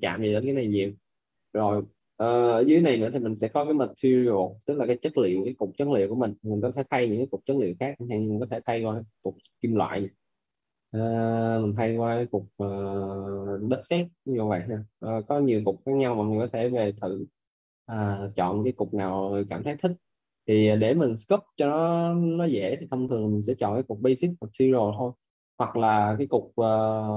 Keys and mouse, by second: 6.2 click, 9.7 click, 11.8 click, 14.0 click.